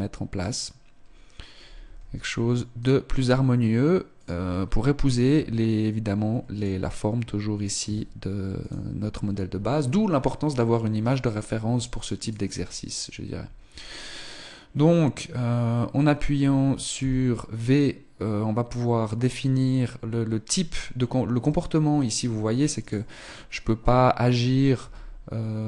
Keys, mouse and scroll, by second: 0.4 right click, 1.8 r, 6.5 right click, 7.8 s, 10.8 right click, 12.2 right click, 13.8 right click, 16.9 v, 22.7 right click, 24.8 r.